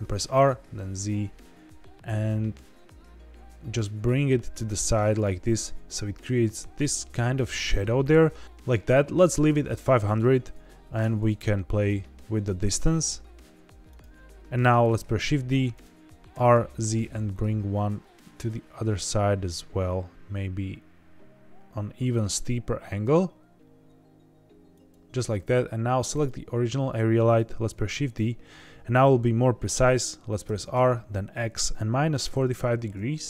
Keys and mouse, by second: 0.0 r, 0.3 z, 5.1 click, 10.9 g, 11.2 z, 11.3 z, 13.8 click, 15.1 shift+d, 15.7 right click, 16.3 r, 16.5 z, 24.7 click, 27.7 shift+d, 28.0 right click, 30.4 r, 30.7 x, 32.0 KP_Subtract, 32.3 KP_4, 32.3 KP_5.